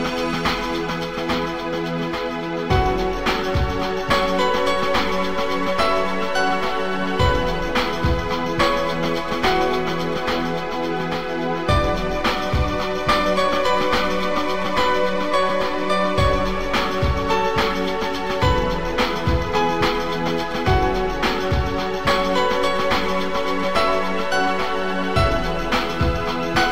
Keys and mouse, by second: 0.2 click, 3.5 click, 4.6 Return, 6.2 click, 7.8 BackSpace, 9.6 click, 10.3 click, 12.7 click, 14.5 click, 15.1 click, 15.9 click, 18.7 Return, 20.5 click, 21.8 click, 24.0 click, 24.6 click.